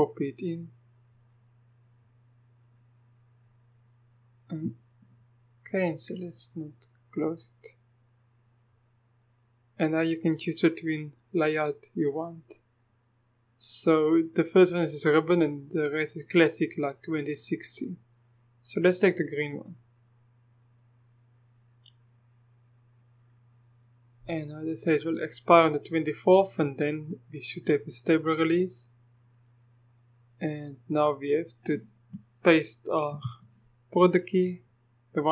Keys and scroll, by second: 33.1 ctrl+v.